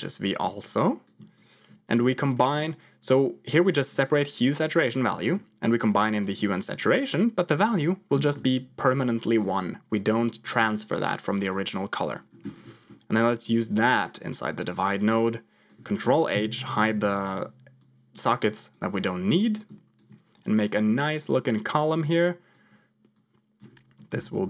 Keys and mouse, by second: 0.5 ctrl+click, 0.7 ctrl+click, 1.3 ctrl+click, 2.1 middle click, 3.0 click, 5.0 middle click, 5.5 click, 6.6 click, 7.6 click, 9.2 click, 11.4 click, 12.6 middle click, 13.3-14.4 drag, 15.0 click, 16.2 ctrl+h, 17.1 click, 17.9 click, 19.5 ctrl+click, 20.4 click, 21.4 click, 21.6 click, 23.0 click, 24.0 ctrl+j, 24.3 F2.